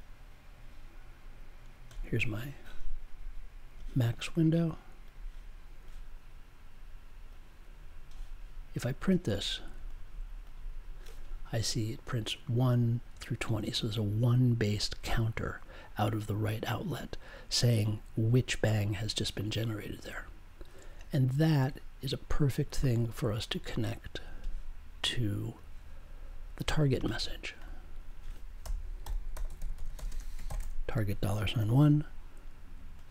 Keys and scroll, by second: 28.6-31.0 typing, 31.5 super+j.